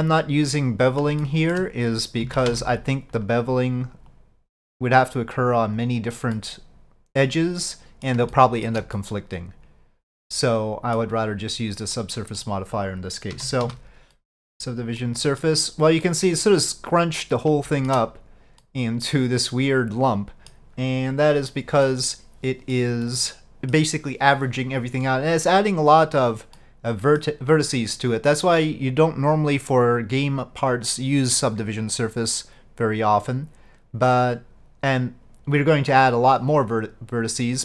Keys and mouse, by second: 1.3 shift+middle click, 2.3 alt+a, 2.6 c, 4.2-5.8 drag, 6.5-8.1 middle drag, 8.4 shift+middle click, 9.0-11.1 middle drag, 12.1 middle click, 15.1 middle click, 16.1 middle click, 17.7 shift+middle click, 18.7-20.6 middle drag, 21.9 middle click, 23.1 middle click, 26.6 middle click.